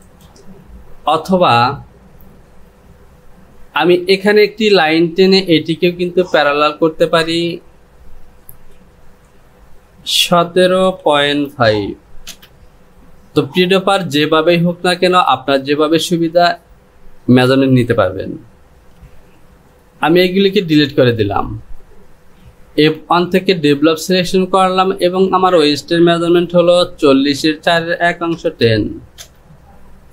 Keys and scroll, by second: 18.9 Delete.